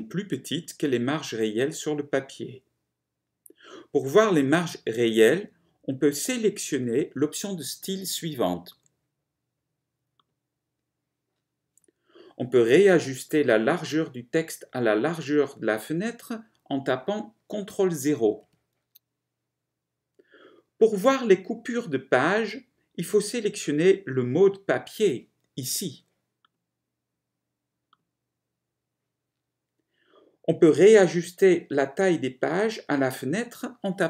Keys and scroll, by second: 18.6 ctrl+0.